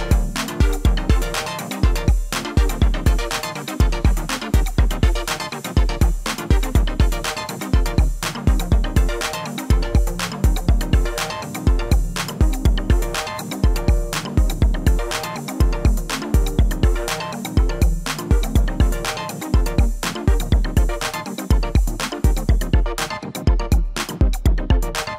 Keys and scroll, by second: 2.9 ctrl+a, 18.5 ctrl+a.